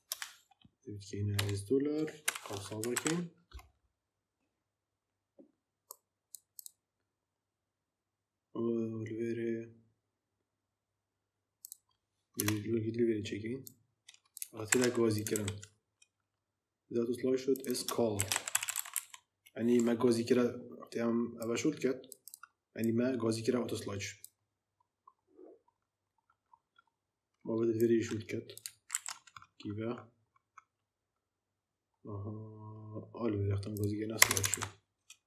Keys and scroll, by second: 1.3 shift+4, 2.1 shift+[, 2.8 ctrl+v, 12.3 Return, 14.6 ctrl+c, 17.8-19.3 typing, 28.8 ctrl+c, 34.1 Return, 34.4 ctrl+v.